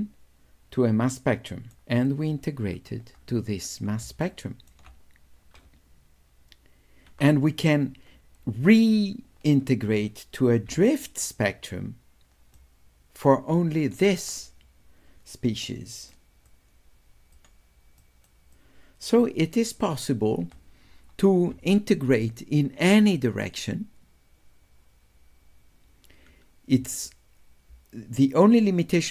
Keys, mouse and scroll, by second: 2.1 click, 4.3 shift+right click, 4.5 shift+click, 10.7 d, 11.1 right click, 11.5-12.6 drag, 15.7 right click, 16.5 click, 18.1 right click, 18.6 click.